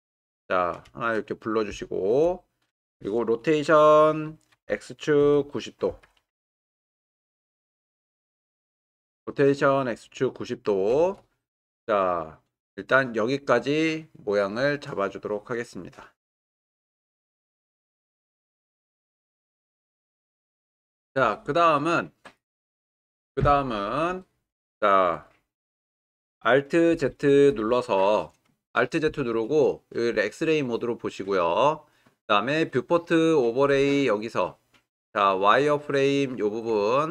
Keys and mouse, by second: 0.9-2.1 shift+middle drag, 4.5 r, 5.2 x, 5.9 9, 6.1 0, 7.6 Return, 22.7 click, 27.1 alt+z, 31.8-37.1 drag.